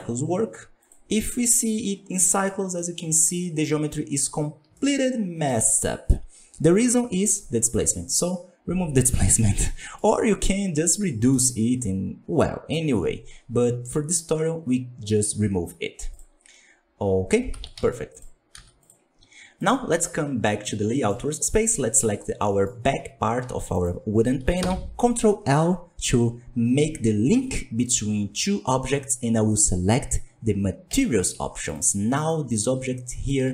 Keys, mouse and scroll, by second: 1.2-2.1 scroll down 1, 2.1-3.0 middle drag, 3.0 scroll up 2, 3.9 scroll up 2, 4.7-7.4 shift+middle drag, 7.4 click, 9.6 scroll down 6, 9.8-13.9 middle drag, 16.0-17.7 drag, 17.7 z, 18.8 z, 19.5 click, 20.4-21.4 middle drag, 21.4 right click, 22.1 scroll down 3, 22.3 middle click, 22.6 scroll up 3, 23.7 shift+right click, 31.6 right click, 32.0 scroll down 1, 32.2-33.3 middle drag, 33.3 Tab.